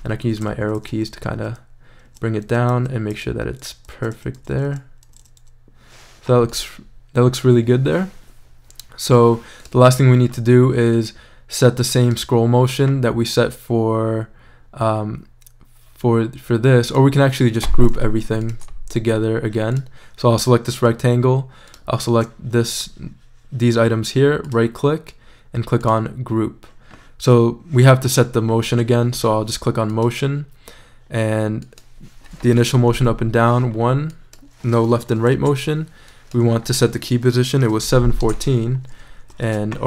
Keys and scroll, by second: 0.4 Down, 2.5 Up, 2.7 Down, 4.4 Up, 32.8 shift+i, 35.1 shift+0, 35.3 shift+Return, 37.4-38.4 typing, 39.4 shift+super+z.